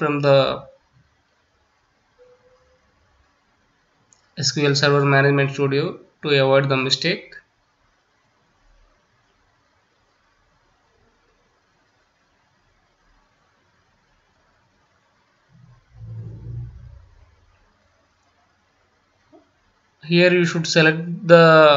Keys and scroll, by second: 6.6 ctrl+c.